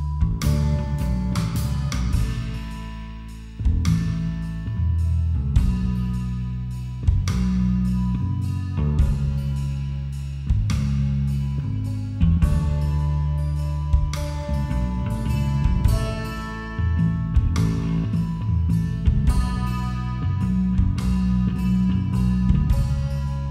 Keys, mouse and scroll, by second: 3.7 s, 7.4 s, 9.0 s, 11.0 s, 12.9 a, 13.2 middle click, 14.2 a, 14.6 a, 14.8 middle click, 16.2 middle click, 17.9 middle click, 18.6-19.9 right drag, 18.9 a, 20.0-21.2 drag, 22.8 click, 23.3 middle click.